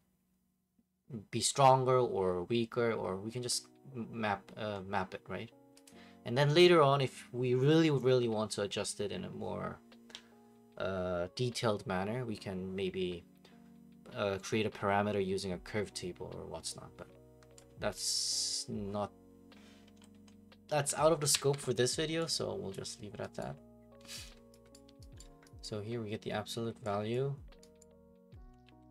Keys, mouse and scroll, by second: 4.6-7.9 drag, 5.8 middle click, 17.9-20.0 drag, 20.2 middle click, 21.3 alt+g, 22.7 click, 23.4 right click, 24.7 right click, 25.2 right click, 25.7 right click, 27.1 click, 27.9 right click, 28.4 ctrl+c, 28.6 ctrl+v.